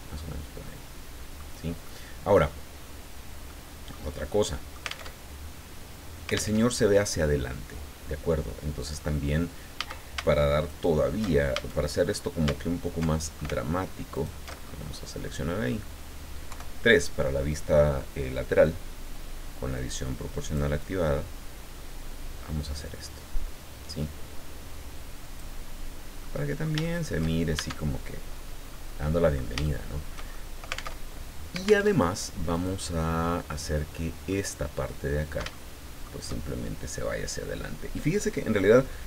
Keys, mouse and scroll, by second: 1.8 middle click, 2.9 scroll down 2, 3.5 middle click, 4.2 middle click, 5.1 alt+Tab, 6.5 alt+Tab, 9.0-9.4 scroll up 2, 9.7 a, 10.6 alt+shift+right click, 11.5 alt+shift+a, 12.0-12.4 alt+shift+scroll up 3, 13.1 alt+shift+middle click, 14.1 alt+shift+right click, 14.6-15.1 alt+shift+scroll down 5, 15.2 click, 16.5 KP_3, 19.7-25.5 drag, 26.2 middle click, 26.9 shift+middle click, 27.6 shift+Tab, 28.7 middle click, 29.6-31.0 shift+middle drag, 31.0 alt+Tab, 31.9 alt+Tab, 32.5 right click, 32.9-34.5 middle drag, 35.5 shift+middle click.